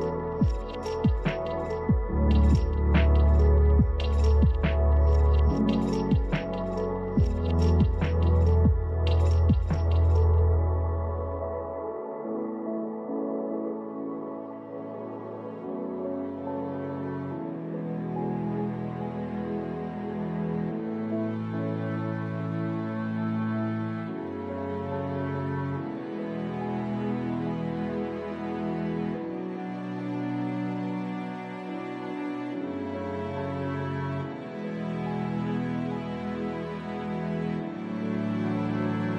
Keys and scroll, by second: 4.6 ctrl+z, 12.6 ctrl+z, 18.9 space, 23.0 space, 27.2 space, 31.2 space, 32.9 space, 33.2 ctrl+z, 35.1 space.